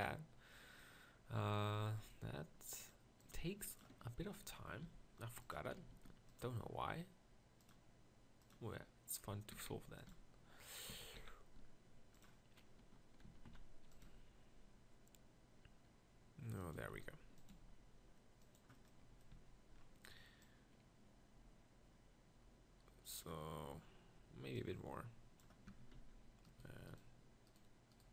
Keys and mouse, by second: 1.4 z, 4.8 g, 5.9 g, 8.7 g, 9.7 s, 10.1 g, 10.9 s, 13.3 s, 14.0 g, 19.4 z, 25.8 Tab, 26.0 z.